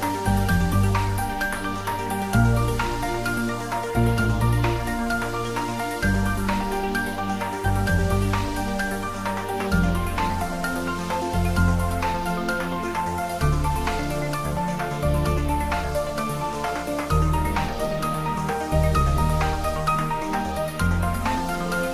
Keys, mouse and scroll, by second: 5.5-6.0 scroll up 1, 6.8-10.0 middle drag, 10.0-12.7 middle drag, 12.7 ctrl+r, 17.1 click.